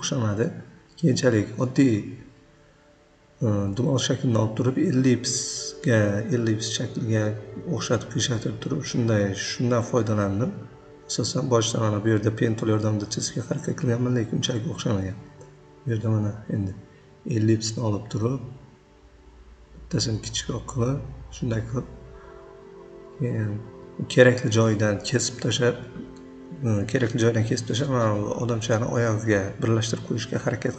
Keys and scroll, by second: 3.0 ctrl+z, 3.1 ctrl+z, 3.9 v, 8.1 p, 9.2 ctrl+z, 9.5 c, 11.2 ctrl+z, 11.8 Delete, 12.0 v, 13.3 v, 30.2 p.